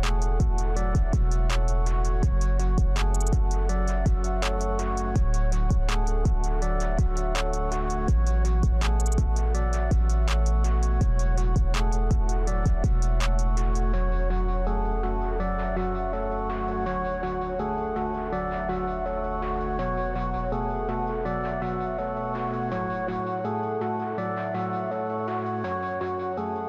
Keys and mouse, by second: 0.4 click, 1.6 click, 2.6 click, 4.8-6.2 drag, 13.3-14.9 drag, 21.0 click, 25.8-26.6 drag.